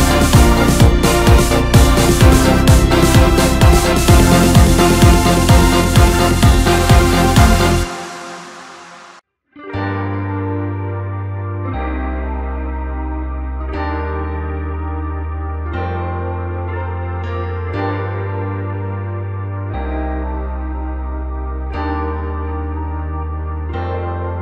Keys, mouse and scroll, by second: 0.6-2.0 middle drag, 2.0 scroll up 4, 2.9 click, 3.3 scroll up 2, 3.6-3.9 scroll down 3, 3.9 middle click, 4.4-5.4 scroll up 1, 7.6-8.4 drag, 9.7 drag, 9.9 scroll down 2, 10.1-11.2 middle drag, 11.2-12.4 scroll up 5, 14.1-14.4 drag, 14.4-14.8 scroll down 1, 14.8-16.1 middle drag, 16.1 click, 16.4-17.4 middle drag, 17.4-17.8 scroll down 4, 17.8-19.1 middle drag, 19.1-19.5 scroll up 2, 19.5 click, 19.9 scroll up 2, 20.1 scroll down 4, 20.3-22.3 middle drag, 22.3 click.